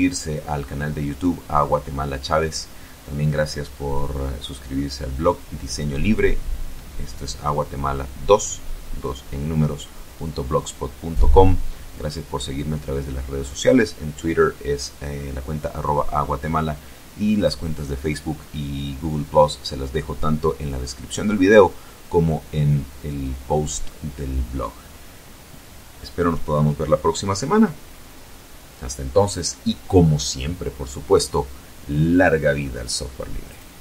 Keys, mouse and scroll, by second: 32.6 click.